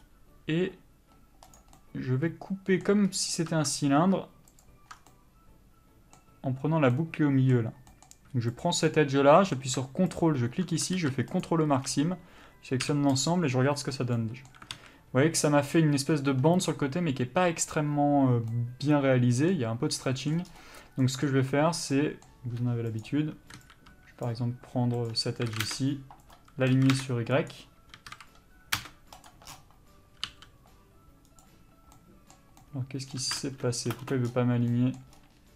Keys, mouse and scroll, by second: 0.1-1.6 scroll up 1, 1.6 click, 2.0 middle click, 3.3 scroll up 1, 3.9-4.8 scroll down 1, 4.8 ctrl+click, 5.1 scroll down 1, 5.3 middle click, 8.7 click, 9.1 middle click, 10.4 ctrl+click, 11.6 ctrl+e, 11.9 a, 12.1-13.0 scroll down 1, 13.5 u, 14.9 alt+a, 18.7 middle click, 23.2 click, 24.4 b, 25.3 click, 25.6 s, 26.5 right click, 26.8 s, 30.4 g, 34.1 ctrl+space.